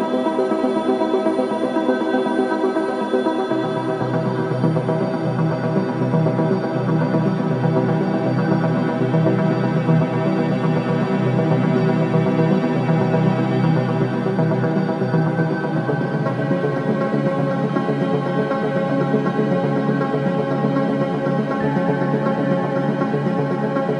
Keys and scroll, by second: 0.4 F9, 2.6 3.